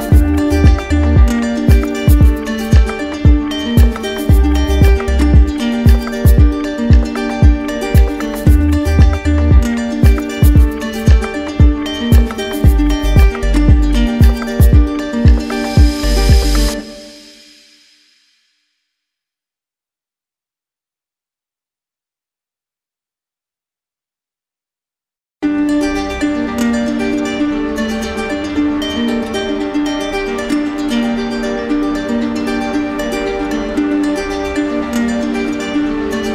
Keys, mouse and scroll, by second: 0.8-1.6 typing, 2.8 click, 4.7 click, 5.2 alt+click, 6.5 click, 7.9 right click, 8.5-10.2 typing, 8.7 right click, 16.7 click, 17.7-19.0 typing, 20.6 alt+click, 21.8 right click, 24.5 click, 26.4 right click, 27.4 alt+right click, 28.5 right click, 30.1 click, 31.9 right click, 32.4 shift+right click, 33.4 right click, 34.4 typing.